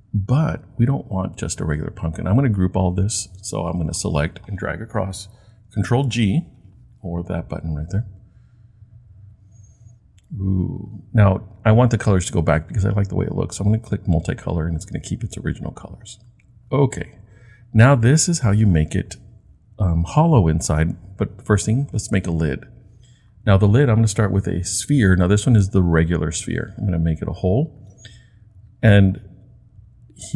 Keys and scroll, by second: 5.9 super+g.